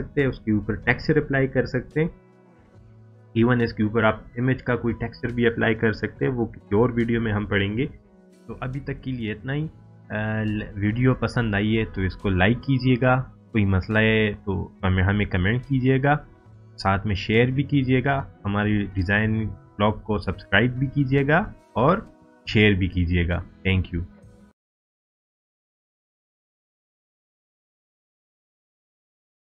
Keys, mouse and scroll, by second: 0.7-1.6 drag, 8.3 click.